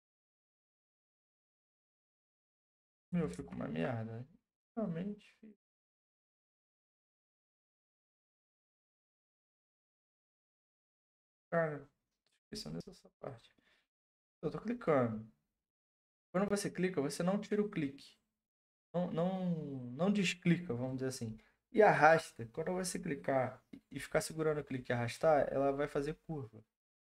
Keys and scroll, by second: 3.3 ctrl+z.